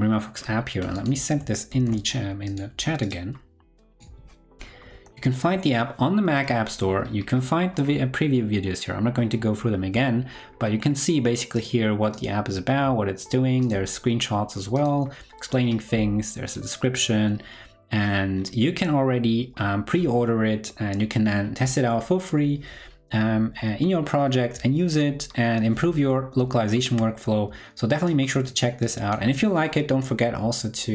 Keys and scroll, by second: 1.6 super+c.